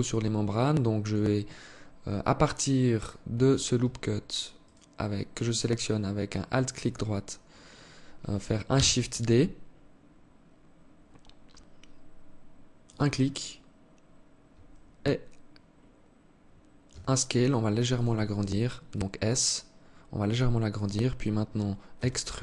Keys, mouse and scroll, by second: 4.0 alt+right click, 4.9 alt+right click, 8.1 shift+d, 16.2 s, 17.6 alt+click, 21.4 e.